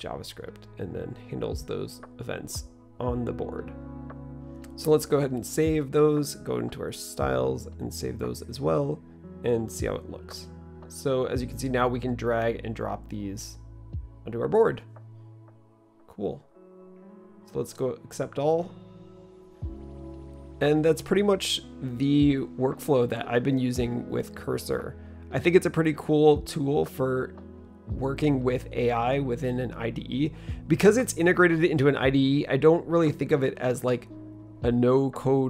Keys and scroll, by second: 19.8 typing.